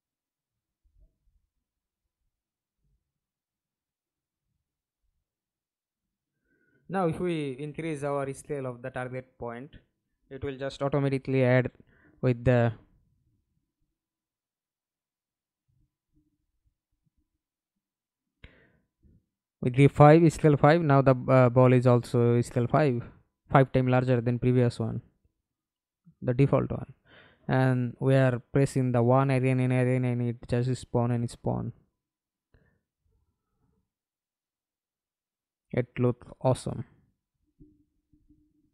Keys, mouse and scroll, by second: 0.7 Escape, 1.2 middle click, 2.1 F11, 6.5 KP_5, 7.1 Return, 9.0 middle click, 9.6 ctrl+space, 13.9 middle click, 15.1 F11, 15.9 alt+p, 18.2 1, 20.6 1, 22.2 1, 23.5-38.7 typing.